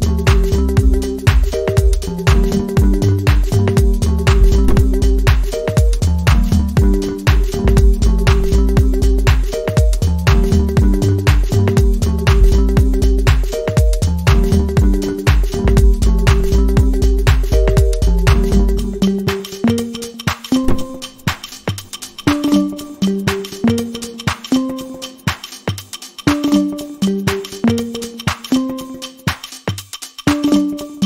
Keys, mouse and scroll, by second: 6.0-7.8 alt+scroll down 8, 20.8 double click, 29.5 alt+click.